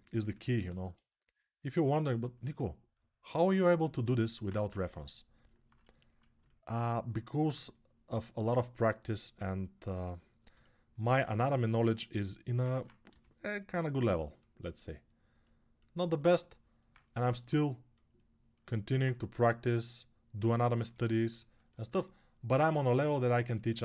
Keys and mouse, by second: 7.2 3, 12.8 g, 18.3-21.4 alt+right drag, 21.4-23.8 alt+drag.